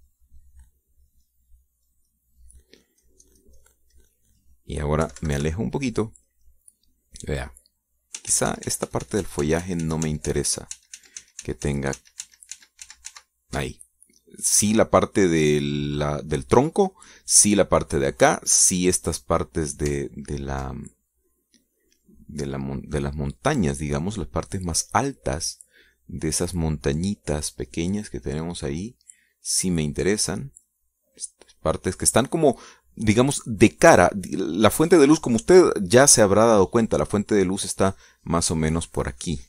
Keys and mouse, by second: 1.0 click, 1.6 click, 2.6 click, 3.4 click, 4.6 click, 5.4 middle click, 5.4 click, 5.8 middle click, 6.5 KP_Subtract, 7.4 middle click, 8.0 middle click, 8.7 click, 9.8 ctrl+z, 15.4 ctrl+click, 16.7 click, 18.1 click, 21.9 ctrl+click, 22.6 ctrl+click, 23.2 click, 23.7 click, 24.4 click, 26.8-30.1 drag, 30.4-31.4 drag, 31.7-32.8 drag, 33.4-34.7 drag.